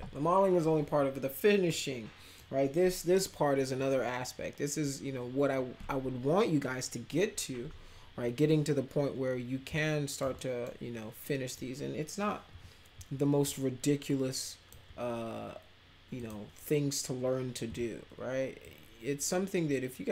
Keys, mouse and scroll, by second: 1.7 middle click, 9.7-10.2 alt+middle drag, 10.3 middle click, 11.2-11.6 middle drag, 12.5 e, 13.4-14.7 shift+drag, 16.2 click, 18.6-20.1 drag.